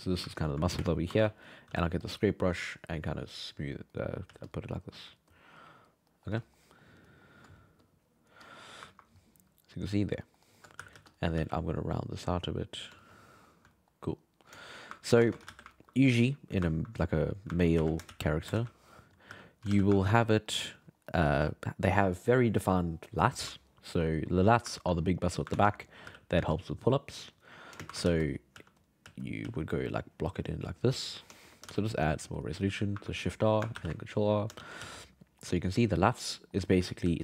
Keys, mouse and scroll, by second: 0.4 ctrl+click, 0.8 shift+space, 1.4 middle click, 1.7 f, 2.3-3.9 drag, 3.9 middle click, 4.3 f, 4.9 f, 5.3 click, 6.1 middle click, 7.0 alt+middle click, 7.8-8.9 drag, 8.9-10.2 ctrl+middle drag, 10.4 alt+middle click, 10.8 g, 10.9 f, 11.4 f, 11.9-13.0 drag, 13.0 shift+middle click, 14.6 shift+middle click, 15.2 ctrl+Tab, 15.5 alt+a, 15.7-17.0 ctrl+middle drag, 17.0 right click, 17.5 ctrl+middle drag, 17.7 s, 19.3 g, 19.7 alt+a, 20.0 ctrl+middle drag, 20.7 alt+middle drag, 21.5 alt+middle drag, 24.1-25.2 ctrl+middle drag, 25.2 right click, 25.5 ctrl+Tab, 26.1 g, 26.3 f, 26.9 click, 27.8-29.4 typing, 29.9-31.7 drag, 31.7 shift+r, 33.8 ctrl+r, 34.6 shift+c, 34.8 f, 35.2-37.0 middle drag, 37.0 f.